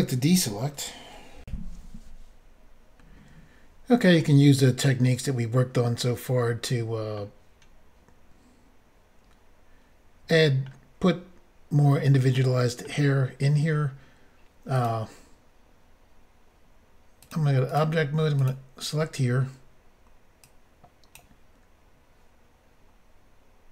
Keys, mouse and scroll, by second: 1.4 Insert, 4.2 middle click, 10.3 middle click, 12.3 middle click, 14.7 click, 14.8 click, 17.2 click, 17.7 click, 18.4 click, 20.5 click.